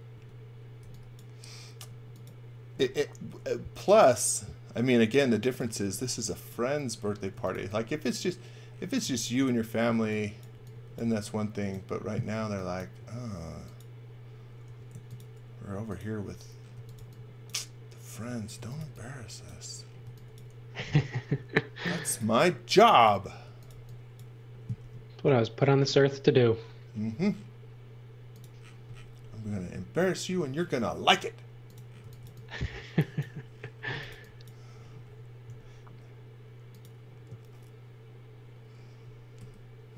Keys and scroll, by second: 0.1 space, 0.8 e, 1.8 space, 3.0 m, 6.0 e, 7.1-11.0 typing, 12.4 x, 13.0 space, 14.6 m, 16.5-20.9 typing, 23.4 x, 23.7 v, 24.8 m, 31.8-35.4 typing, 39.3 shift+5.